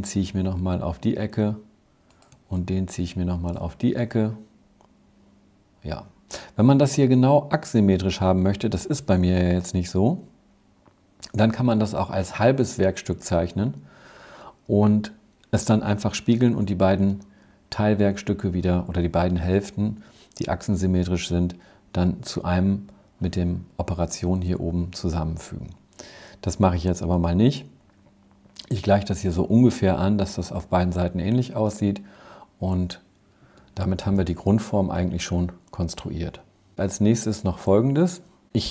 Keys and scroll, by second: 32.4 Escape, 33.0 Escape.